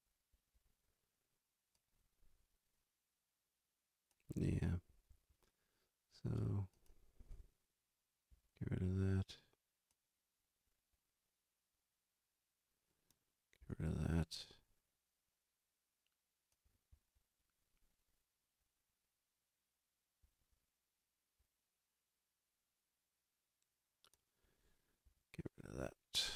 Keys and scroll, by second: 8.3 s, 13.6 Delete, 25.0 Delete.